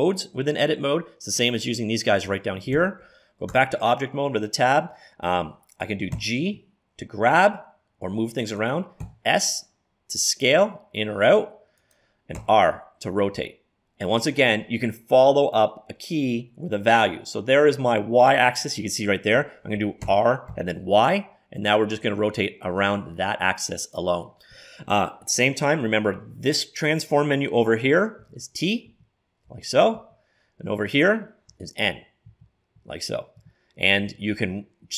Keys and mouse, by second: 2.8 Escape, 3.6 Tab, 6.2 g, 9.1 s, 12.5 r, 20.1 r, 28.3 t, 28.9 t, 29.5 t, 30.0 t, 31.6-34.1 typing.